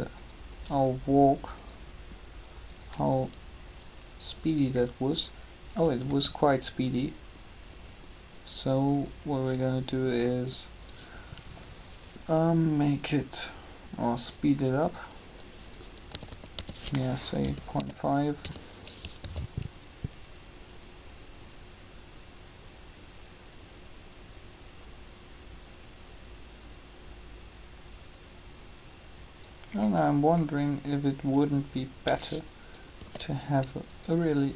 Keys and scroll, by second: 6.0 alt+a, 16.1-18.4 typing, 19.2 alt+a, 32.9 shift+d.